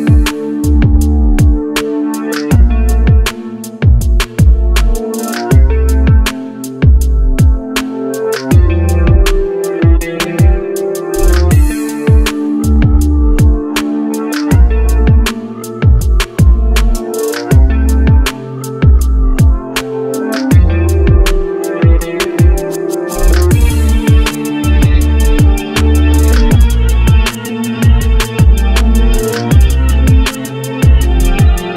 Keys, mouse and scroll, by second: 0.2 middle click, 1.0 s, 2.8 middle click, 3.7 click, 4.5 click, 5.0-5.6 scroll down 4, 5.6-6.1 scroll up 2, 6.6 shift+middle click, 7.2 click, 8.1 s, 10.1 Tab, 10.5 Tab, 11.0 click, 12.0 s, 13.9 g, 16.2 click, 17.0 g, 18.5 s, 19.2 Tab, 19.8 click, 20.1-21.6 middle drag, 22.6 click, 23.9 g, 25.9 middle click, 26.2 click, 26.5-28.0 middle drag, 28.6 click, 29.0-30.5 scroll down 1, 30.7-31.7 scroll up 1.